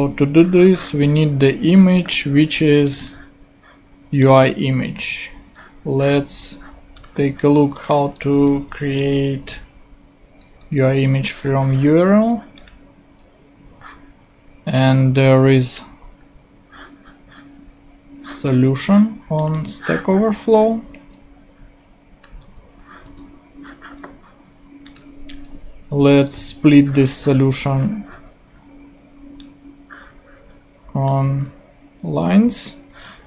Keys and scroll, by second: 0.0 super+v, 8.4 super+v, 9.0 super+space, 10.6 Return, 22.4 super+c, 23.0 super+Tab, 25.9 Down, 26.2 Return.